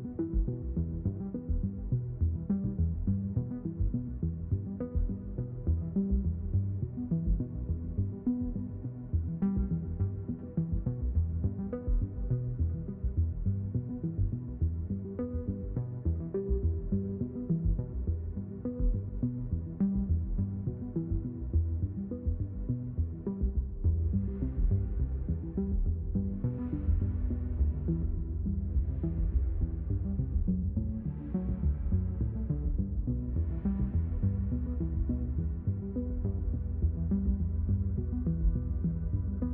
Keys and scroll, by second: 7.7 ctrl+z.